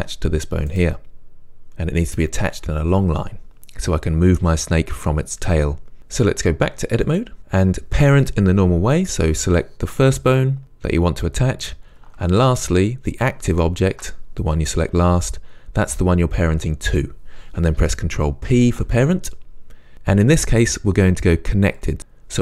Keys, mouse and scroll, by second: 0.0 g, 0.8 right click, 6.5 click, 13.2 shift+click, 18.6 ctrl+p.